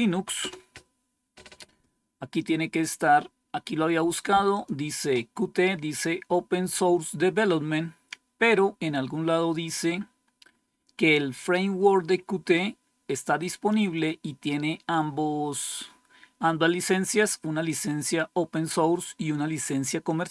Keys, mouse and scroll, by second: 0.3 Return, 3.0-4.0 scroll down 1, 4.4 click, 4.9-5.6 typing, 11.4-13.6 drag.